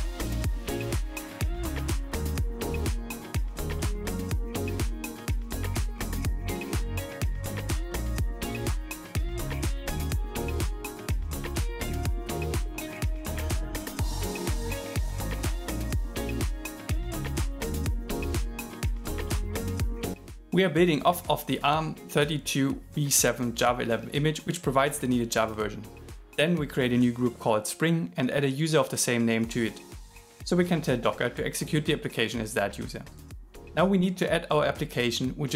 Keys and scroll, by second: 0.0-10.5 typing, 11.5-17.1 typing, 13.7 alt+5, 13.8 alt+6, 18.6 shift+2.